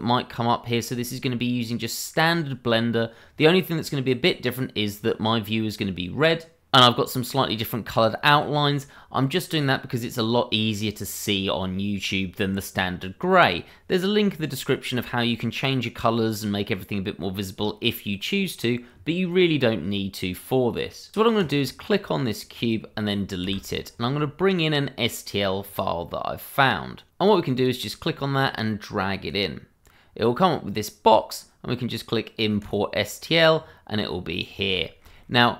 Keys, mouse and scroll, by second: 7.4 click, 8.0 double click, 21.4 click, 23.4 Delete, 27.1 click, 27.7 double click, 28.4 click, 32.6 click, 33.5-34.0 scroll down 1, 34.3 middle click, 34.8 shift+middle click, 34.9 middle click, 34.9 shift+middle click, 35.4 middle click.